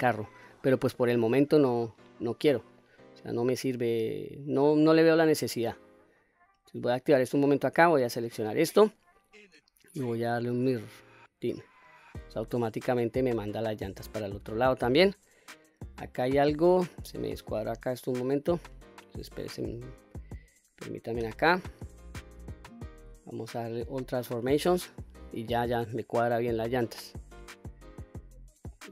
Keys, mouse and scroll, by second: 0.5-1.2 middle drag, 1.7-2.2 scroll down 1, 2.2-2.8 middle drag, 3.7 click, 6.4 click, 7.5 click, 8.8-11.1 drag, 11.8-16.1 middle drag, 16.6-17.2 middle drag, 19.1-19.5 scroll up 1, 19.5-20.1 middle drag, 20.6 click, 22.1 ctrl+a, 24.7-25.6 middle drag, 26.9-28.7 middle drag.